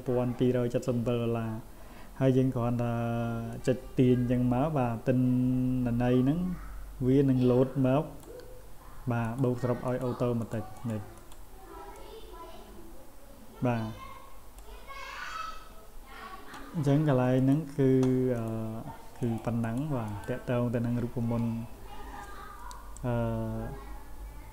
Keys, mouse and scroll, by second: 3.5-8.2 drag, 9.2 click, 9.9 click, 10.4 click, 10.8 click, 11.2 click, 11.9-14.6 drag, 17.4 click, 18.4 click, 19.2 click, 19.6 click, 20.1 click.